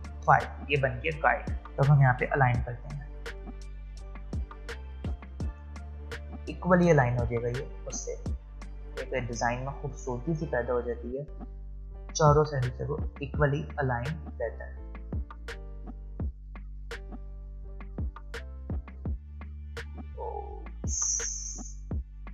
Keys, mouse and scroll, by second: 1.7-2.1 alt+scroll up 1, 2.7-8.3 drag, 9.6-10.0 alt+scroll up 1, 10.7-11.7 alt+scroll down 1, 11.7-12.1 alt+scroll up 1, 12.5-18.3 drag.